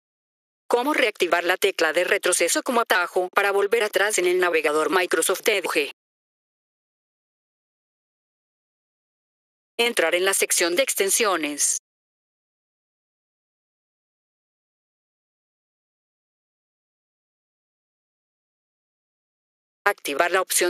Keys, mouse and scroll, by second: 0.6 click, 8.2 scroll down 2, 9.2 F4, 9.7 click, 11.7 click, 15.1-16.1 drag, 19.4 F4, 19.7 click.